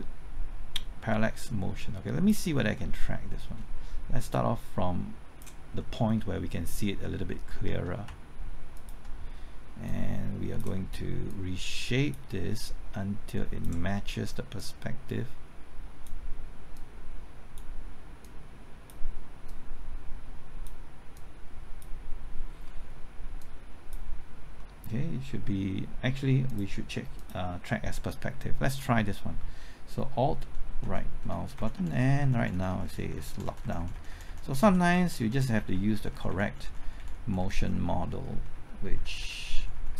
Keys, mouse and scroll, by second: 2.5-3.0 scroll up 1, 3.0 middle click, 3.4-4.3 scroll up 1, 4.3 click, 5.8 middle click, 6.2 scroll up 1, 6.5 middle click, 7.0-7.3 scroll up 1, 7.3 middle click, 8.0 typing, 8.7 ctrl+click, 9.8-11.0 drag, 11.0 click, 12.5-16.7 drag, 16.7-21.0 drag, 22.4-23.4 scroll down 1, 23.4 click, 24.5 middle click, 26.4 click, 30.1-31.9 typing, 31.5 alt+Right.